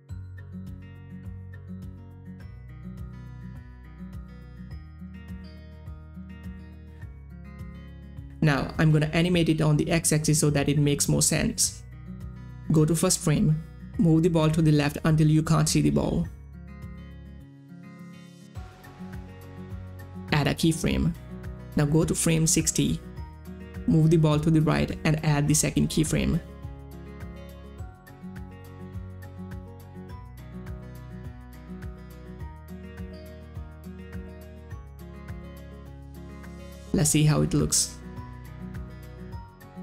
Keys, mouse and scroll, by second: 5.1-6.8 drag, 14.2 middle click, 14.4-20.8 shift+drag, 22.8-24.3 drag, 25.4-28.9 drag, 28.9-32.1 drag, 34.6-36.8 drag, 39.1 click, 39.1 space.